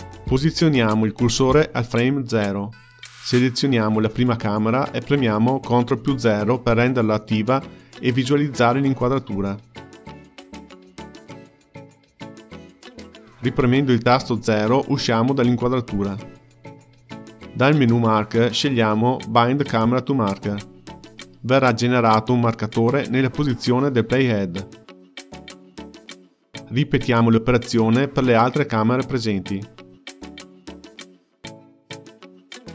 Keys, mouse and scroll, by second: 4.6 click, 7.8 ctrl+KP_0, 13.5 KP_0, 17.6-20.7 drag, 24.1 space, 25.5 space, 28.2 click, 31.0-32.7 drag.